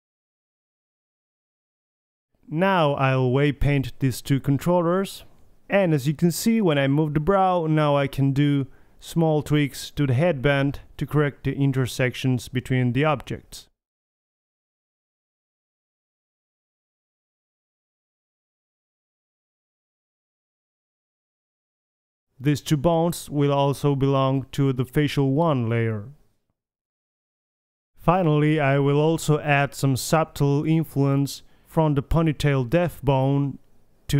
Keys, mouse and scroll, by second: 0.2 ctrl+p, 0.2 click, 0.7 Tab, 0.8 KP_3, 1.4 click, 2.9 middle click, 3.4 middle click, 3.8 click, 4.9 drag, 5.4-5.8 drag, 6.5 middle click, 6.7 click, 7.3 g, 8.1 g, 8.6 click, 8.9 g, 9.8-10.3 drag, 10.3 middle click, 10.6-11.7 middle drag, 10.8 g, 12.2 r, 13.9 g, 15.2 g, 17.3-18.3 middle drag, 17.4 r, 19.2-19.7 middle drag, 19.7 a, 19.9 a, 20.2 alt+g, 20.4 alt+r, 20.6 alt+s, 20.6 a, 21.0 KP_1, 23.4-24.6 drag, 23.7 m, 27.8 middle click, 28.4 a, 29.5 KP_1, 30.1-30.8 right drag, 30.5 g, 31.2 KP_3, 31.6 g, 33.1 click, 33.9 click.